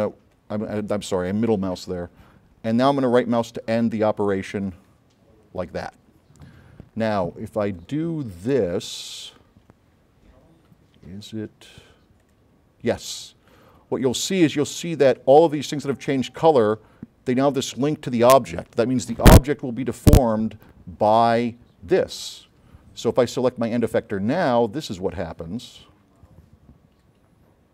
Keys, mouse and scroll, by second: 4.8 right click, 7.9 click, 12.3 click, 14.0 middle click, 14.0 scroll up 1, 23.4 click, 25.0 click.